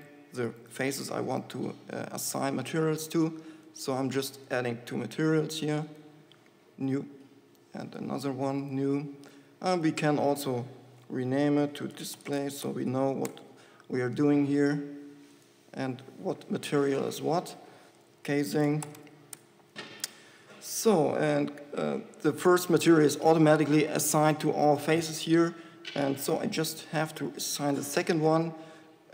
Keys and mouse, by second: 0.4-11.8 drag, 15.7-19.2 drag, 27.2-29.1 drag.